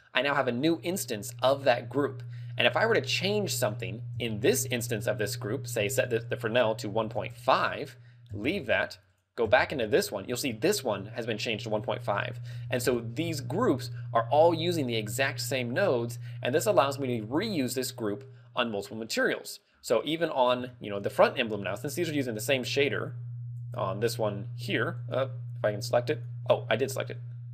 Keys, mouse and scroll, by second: 0.8 click, 2.1 click, 3.3 click, 4.3 Tab, 6.0 ctrl+click, 7.6 ctrl+click, 8.5 Tab, 9.2 click, 9.5 Tab, 11.6 ctrl+click, 13.7 Tab, 16.5 click, 17.4 x, 18.7 click, 19.8 scroll down 4, 20.2 middle click, 20.8 shift+middle click, 22.8 right click, 24.1 right click, 25.5 right click, 26.6 right click.